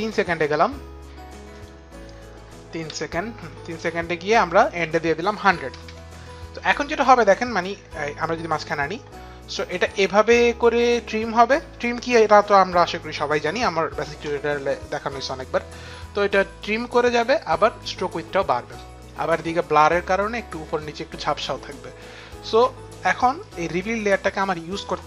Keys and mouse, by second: 1.4 Return, 1.4 click, 1.4 KP_0, 2.5 Page_Down, 2.5 Return, 2.5 click, 2.5 KP_0, 4.1 click, 5.1 KP_1, 5.4 Page_Down, 5.4 click, 5.4 KP_0, 5.4 KP_1, 7.1 click.